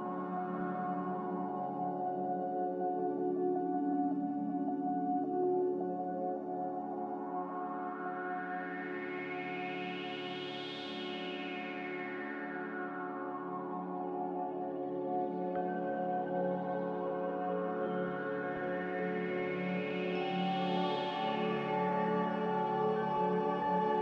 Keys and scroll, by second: 1.3 typing, 2.4 z, 3.6-4.4 typing, 7.4 ctrl+c, 7.4 a, 16.0 z, 17.1 Escape, 17.4 n.